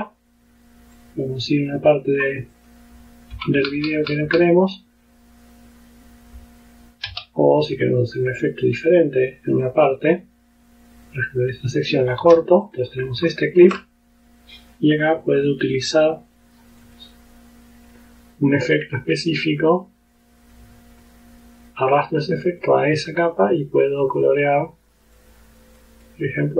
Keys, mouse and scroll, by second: 1.0 click, 2.6 click, 3.4 Right, 7.2 x, 9.7 click, 11.1 click, 12.3 s, 12.7 click, 13.3 ctrl+scroll up 2, 15.3 click, 16.9 click, 20.6-22.4 drag, 22.7 click, 25.2 click, 26.1 click.